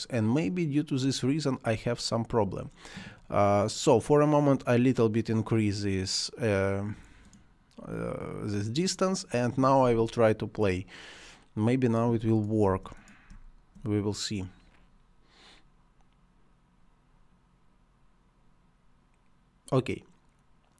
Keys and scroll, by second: 12.6 space.